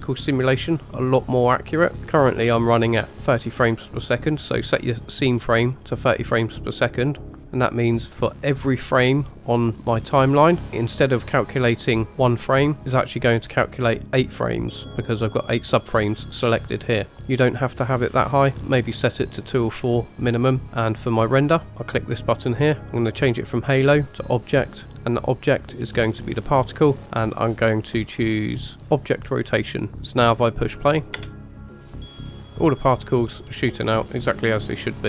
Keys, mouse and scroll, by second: 2.2 click, 5.3-6.2 scroll up 2, 7.3 click, 10.1 click, 12.8-13.4 scroll down 11, 20.6 click, 20.6-21.6 scroll down 5, 22.1 click, 22.8 scroll down 1, 23.3-24.3 drag, 25.2-26.4 drag, 29.0 click, 31.1 space, 33.3-35.0 middle drag.